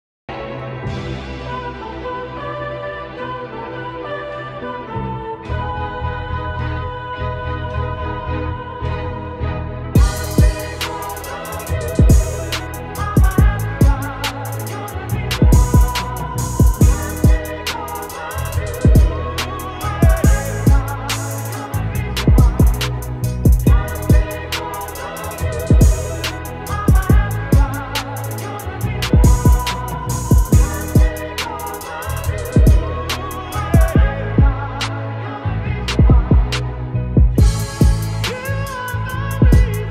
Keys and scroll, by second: 0.0 ctrl+-, 1.9 Return, 4.0 v, 11.4 ctrl+alt+shift+e, 16.1 ctrl+shift+t, 22.1 Return, 23.0 ctrl+z, 25.8 ctrl+shift+t, 30.2 shift+Return, 37.8 ctrl+alt+shift+e, 38.8 ctrl+0, 39.2 ctrl+-, 39.7 -.